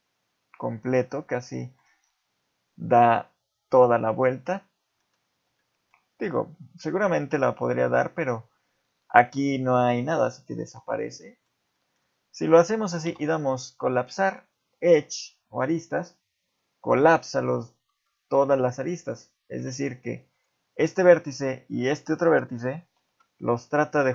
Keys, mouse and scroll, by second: 1.0 middle click, 2.0 scroll up 3, 3.9 middle click, 5.3 z, 5.6 middle click, 6.3-7.1 scroll up 1, 7.5 middle click, 10.6 z, 10.9 scroll down 2, 11.2 middle click, 11.7 middle click, 12.8 middle click, 13.0 x, 17.7 ctrl+z, 19.0 click, 19.7 ctrl+Tab, 20.7 click, 21.5 shift+click, 23.0 alt+m.